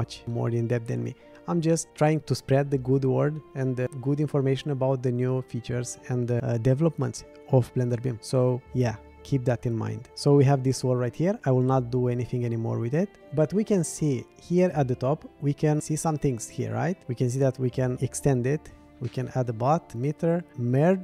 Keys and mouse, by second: 10.1 middle click.